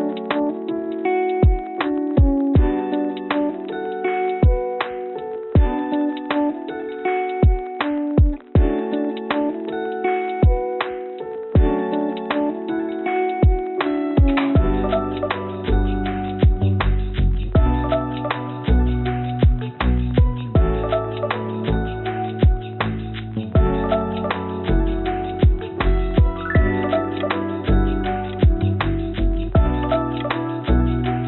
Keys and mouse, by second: 6.1 shift+d, 8.2 s, 9.8 g, 12.9 s, 15.5 click, 16.6 click, 17.7 click, 18.6 click, 18.7-20.3 drag, 21.0 click, 23.0 g, 26.3-27.6 drag, 28.1 g, 30.6 g.